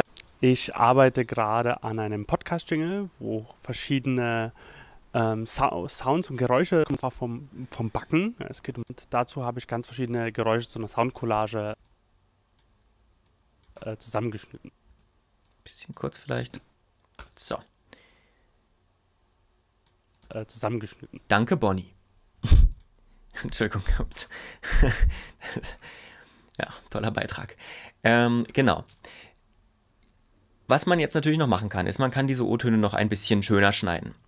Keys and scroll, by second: 11.7 space, 13.7 space, 16.4 space, 20.2 space, 22.3 space.